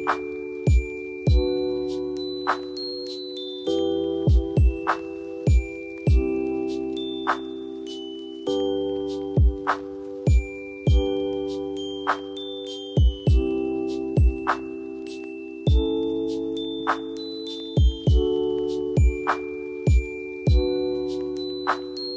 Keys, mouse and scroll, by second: 2.7 Tab, 4.5 right click, 5.7 click, 6.2 click, 7.1 right click, 8.3 click, 9.2-10.2 ctrl+drag, 13.5 right click, 15.0 click, 16.6 click, 17.1 right click, 17.8 click, 20.3 Tab.